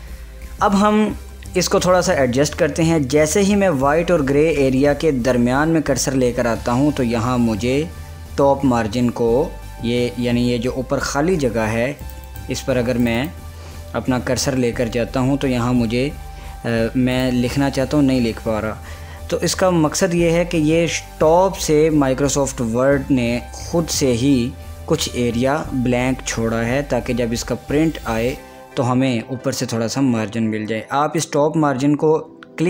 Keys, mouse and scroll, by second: 0.3 click, 12.1 click, 17.2 click, 31.3-32.6 drag.